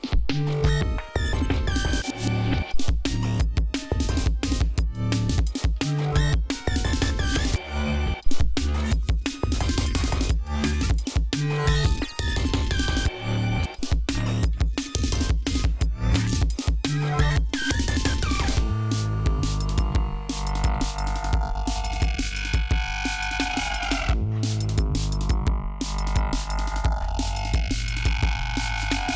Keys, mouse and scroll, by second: 0.7 scroll down 2, 1.4-1.7 scroll down 2, 1.8-2.6 scroll up 4, 3.6-4.3 ctrl+scroll down 5, 4.5 scroll up 2, 4.8 ctrl+scroll down 2, 5.2-5.7 ctrl+scroll up 4, 5.7 ctrl+scroll down 2, 6.0 ctrl+scroll up 2, 6.9-7.6 scroll down 4, 7.9-8.6 scroll up 4, 8.7 scroll down 2, 9.3 ctrl+scroll down 2, 10.9 scroll down 2, 11.3 ctrl+scroll up 2, 11.9-12.3 ctrl+scroll up 2, 12.9 ctrl+scroll up 1, 14.7 ctrl+scroll down 1, 15.0 ctrl+scroll up 1, 18.8 ctrl+scroll down 2, 19.8 scroll down 2, 20.2 scroll up 2, 20.8 scroll down 2, 21.2 scroll up 2, 25.4-26.0 scroll down 4, 26.0-26.4 scroll up 2, 26.8-28.0 scroll up 6, 28.1-28.8 scroll up 4.